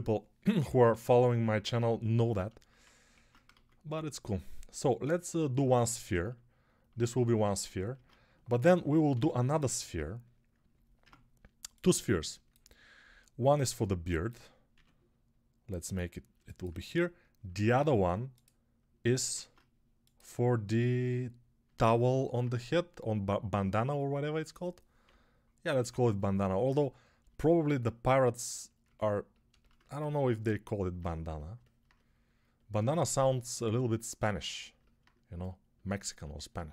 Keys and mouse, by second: 1.3 [, 3.0 ctrl+Tab, 3.4 shift+a, 5.4 Tab, 7.8 ctrl+Tab, 9.0 shift+d, 10.9 Tab, 14.7 s, 16.2-27.1 alt+shift+middle drag, 17.4 ctrl+Tab, 21.7 ctrl+Tab, 24.9-25.7 ], 27.1-36.7 alt+drag.